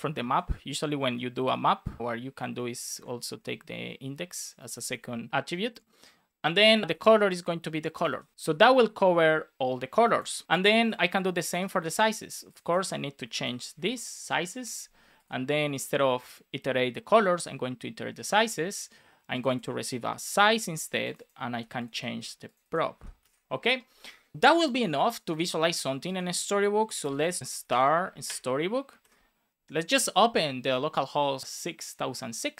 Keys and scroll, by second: 0.2 shift+0, 0.7 alt+Left, 1.4 shift+0, 1.9 BackSpace, 2.0 shift+9, 2.2 Right, 3.3 space, 7.4 shift+p, 7.9 BackSpace, 8.0 shift+[, 8.3 space, 8.9 super+s, 10.1 alt+shift+f, 10.4 super+s, 11.0 super+c, 11.3 Return, 11.7 super+v, 13.2 shift+s, 18.0 Return, 21.4 super+c, 22.1 super+v, 22.9 super+v, 23.2 super+s, 27.4 space, 28.2 Return.